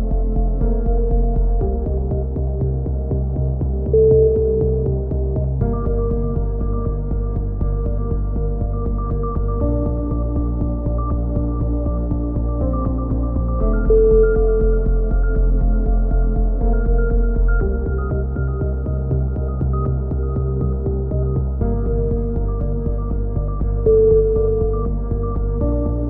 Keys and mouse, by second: 0.1 middle click, 0.4 click, 1.0 middle click, 1.7-2.8 drag, 3.3 KP_3, 3.6 z, 4.2 click, 6.0 Tab, 6.6 c, 7.0-8.8 middle drag, 8.5 e, 8.8-10.1 drag, 11.3 click, 11.8 middle click, 11.9 click, 12.0-14.0 middle drag, 12.5 s, 14.6 click, 15.5 e, 16.0-17.2 drag, 18.2 KP_7, 20.2 a, 20.4 c, 21.6-24.5 drag, 21.9 right click, 24.5 c, 25.6 click.